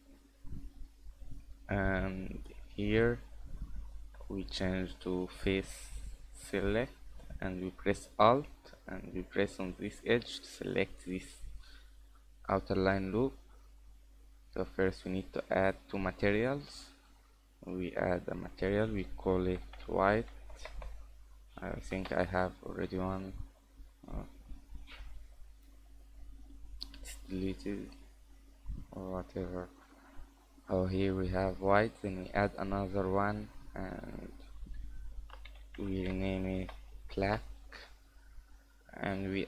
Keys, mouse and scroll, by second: 0.2 middle click, 0.7 shift+middle click, 1.1 middle click, 2.6 click, 3.2 right click, 9.8 alt+right click, 14.3 click, 17.0 click, 18.1 click, 18.3 click, 20.6 BackSpace, 20.8 BackSpace, 24.0 scroll down 5, 24.3-24.6 scroll up 4, 26.5 click, 29.1-29.5 scroll up 2, 32.0 click, 33.3 click, 34.0 click, 34.2 click.